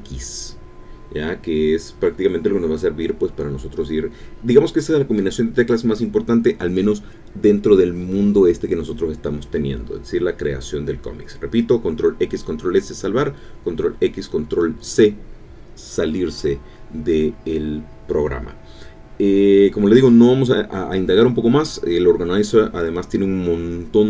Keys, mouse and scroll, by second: 7.8 ctrl+x.